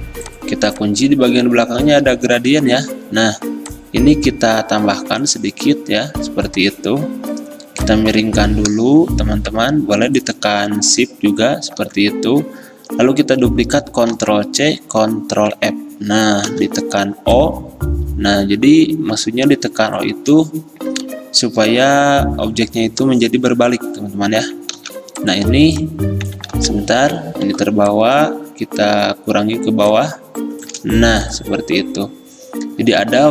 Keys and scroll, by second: 0.0 ctrl+2, 2.2 ctrl+z, 11.9 v, 14.2 ctrl+c, 15.4 ctrl+f, 16.6 o, 24.9 v, 26.6 ctrl+z, 27.6 ctrl+2.